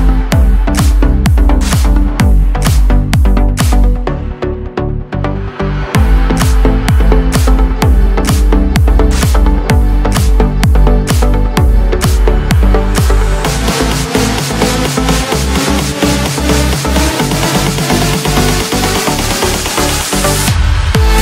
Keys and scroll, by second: 11.0 ctrl+z.